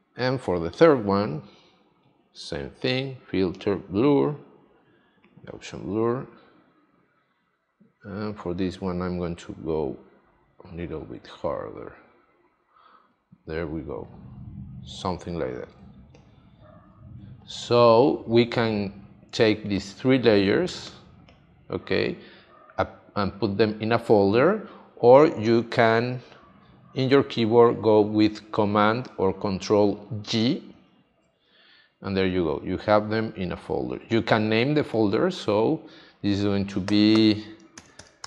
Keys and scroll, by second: 15.8 space, 30.7 super+g, 37.5-38.2 typing.